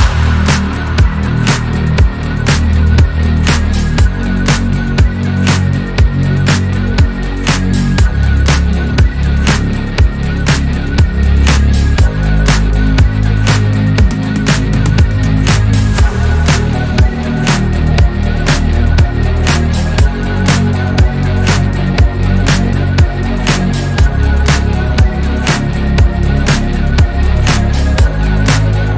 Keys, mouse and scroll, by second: 2.8 click, 4.7 KP_7, 5.5 scroll up 1, 6.2 scroll down 1, 6.3-7.4 middle drag, 7.4 shift+d, 9.6 click, 10.7 KP_1, 11.5 e, 12.6 r, 14.4 click, 15.9 scroll up 4, 16.8 click, 17.8 scroll down 1, 18.2 click, 18.7 click, 19.5 scroll down 3, 19.7-20.4 middle drag, 20.4 KP_3, 20.8-21.4 scroll up 4, 21.4-22.3 middle drag, 22.3 click, 24.2 KP_7, 24.9 shift+middle drag, 25.2 shift+scroll up 2, 26.1 click.